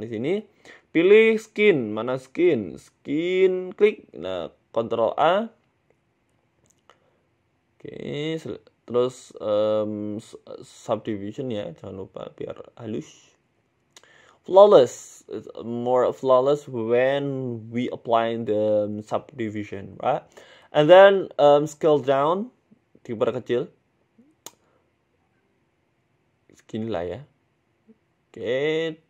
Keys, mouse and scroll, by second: 4.3 middle click, 4.6 scroll down 1, 4.8 Tab, 5.0 middle click, 5.3 ctrl+a, 5.8 a, 9.7 click, 10.0 middle click, 10.2 scroll up 3, 10.4 ctrl+a, 12.3 a, 13.0 s, 13.9 Tab, 14.4-14.7 scroll down 5, 14.6 middle click, 15.3-15.6 scroll down 1, 15.6 click, 16.4 KP_3, 17.2 KP_1, 17.9 scroll down 2, 18.0 shift+middle click, 18.7 g, 19.8 scroll up 4, 20.0 shift+middle click, 20.3 scroll up 1, 20.3 scroll down 1, 20.6 shift+middle click, 20.9 s, 21.6-22.0 scroll up 6, 22.2 scroll down 4, 22.3 scroll down 4, 22.8 g, 24.3 middle click, 25.1 g, 26.4 middle click, 27.3 g, 28.2-28.5 scroll down 4, 28.4 a, 28.5 a, 28.7 middle click.